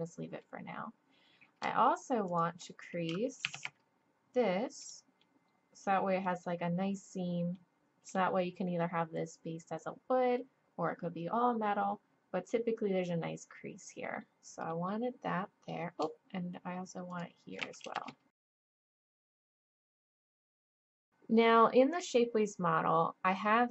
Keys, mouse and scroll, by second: 2.3-3.4 right drag, 3.4 shift+e, 5.9 click, 6.5 middle click, 7.7-11.2 middle drag, 14.7-16.5 drag, 16.5 middle click, 17.1 right click, 17.8 shift+e, 18.4 click, 18.8 shift+e, 19.3 shift+e, 20.0 shift+e, 20.4 click, 20.8 shift+e.